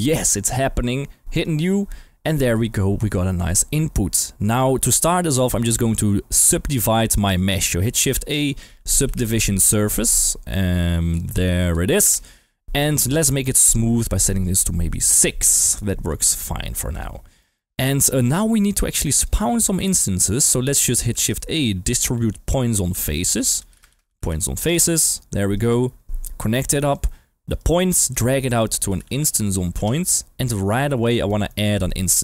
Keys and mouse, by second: 1.3 click, 2.2 middle click, 3.2 middle click, 4.5 click, 6.7 click, 7.8 click, 8.3 shift+a, 10.5 Down, 11.6 Down, 11.8 Down, 12.8 click, 13.5 click, 14.9-15.2 drag, 15.6 g, 15.7 click, 16.1 click, 16.4 g, 16.9 click, 17.4 middle click, 19.0 drag, 20.3 click, 20.3 g, 21.1 shift+a, 25.5 click, 26.4-26.9 drag, 27.6-28.1 drag, 31.0 click, 31.2 middle click, 31.9 g, 32.0 click.